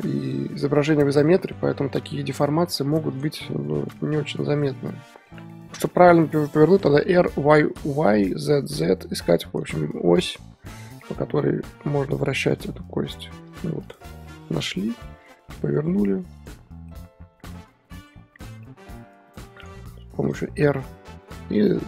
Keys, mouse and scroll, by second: 0.2-0.9 scroll up 1, 0.9 scroll up 2, 1.2 click, 1.3 shift+middle drag, 1.5 scroll down 1, 1.6-2.2 scroll up 3, 2.4 click, 2.6 middle click, 2.6 scroll up 3, 3.2 click, 3.3-3.7 scroll up 7, 3.8 r, 4.7-7.0 middle drag, 10.2 click, 10.4 scroll down 1, 10.7-11.0 middle drag, 11.0 scroll up 1, 11.1-11.5 scroll down 6, 11.5 scroll up 1, 11.6 scroll down 4, 11.7 middle drag, 12.0-12.5 scroll up 4, 12.5 r, 13.9 click, 14.0-14.4 middle drag, 14.4 r, 15.8 r, 16.5 middle click, 17.3 r, 18.5 click, 18.6 middle click, 19.0 r, 20.3 click, 20.6 r.